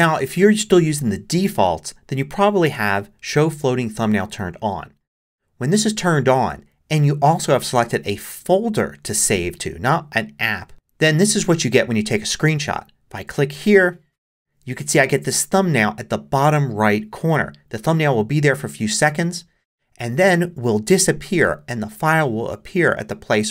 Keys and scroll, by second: 0.3 shift+super+5.